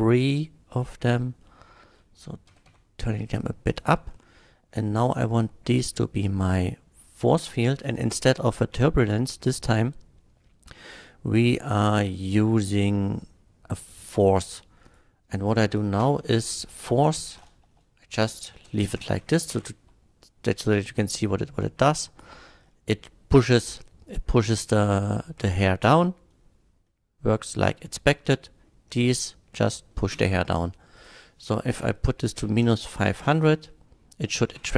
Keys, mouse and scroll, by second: 0.8 drag, 1.4-1.9 middle drag, 2.5 g, 2.9 z, 3.7 drag, 4.1 middle click, 5.8 click, 7.1 click, 8.3 click, 13.8 click, 14.9 click, 16.0 KP_Subtract, 17.7 BackSpace, 18.5 KP_5, 18.7 KP_0, 18.9 KP_0, 19.0 Return, 19.5 shift+click, 21.0 shift+click, 22.0 shift+click, 24.4-24.9 middle drag, 25.9 space, 26.9-28.5 middle drag, 29.5-29.9 middle drag, 30.2 space, 31.0 click, 31.8 KP_Subtract, 32.4 KP_5, 32.7 KP_0, 32.9 KP_0, 33.2 Return.